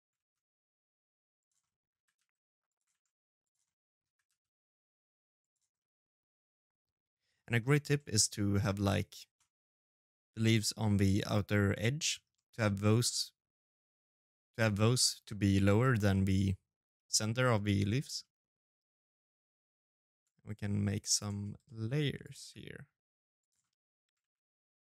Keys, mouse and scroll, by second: 0.4 middle click, 0.7 g, 1.7 shift+d, 2.4 middle click, 2.8 g, 4.5 middle click, 5.4 middle click, 7.2 middle click, 9.2 middle click, 9.2 right click, 9.5 middle click, 9.9 right click, 11.1 middle click, 15.9 middle click, 19.1 middle click, 20.8 shift+d, 22.2 middle click, 22.6 s, 23.2 g, 24.4 middle click.